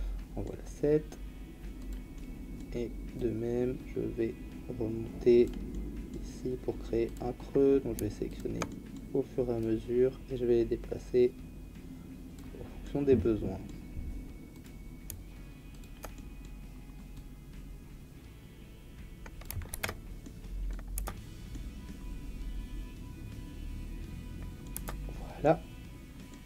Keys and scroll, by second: 19.7 ctrl+z, 21.0 Tab, 24.7 Tab.